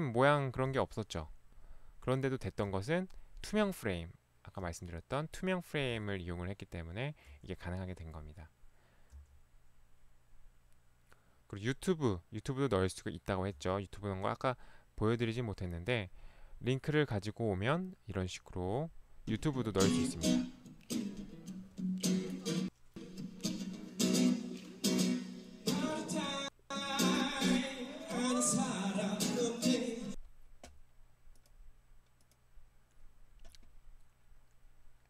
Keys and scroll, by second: 0.7 Right, 2.7 Right, 4.5 Right, 7.4 Right, 9.1 Right, 13.7 Right.